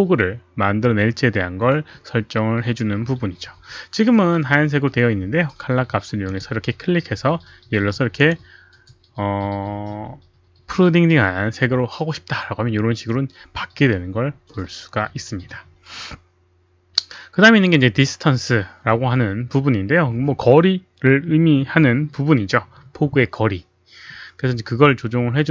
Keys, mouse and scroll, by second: 6.2 click, 8.1 click.